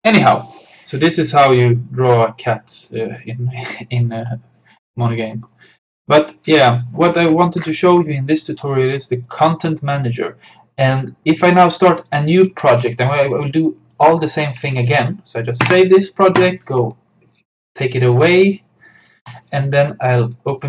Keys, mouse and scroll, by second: 5.1 click, 7.3-8.3 scroll up 1, 9.3 click, 14.0 click, 15.7 ctrl+s, 16.4 click.